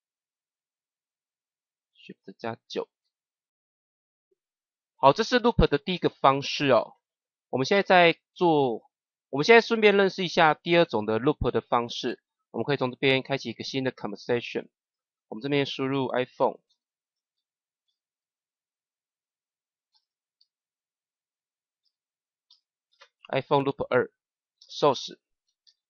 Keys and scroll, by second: 2.6 shift+9, 16.4 |, 17.3 o, 17.8 n, 19.8 shift+-, 20.3 l, 21.7 p, 22.4 shift+-, 22.8 2, 24.5 shift+-, 25.4 s.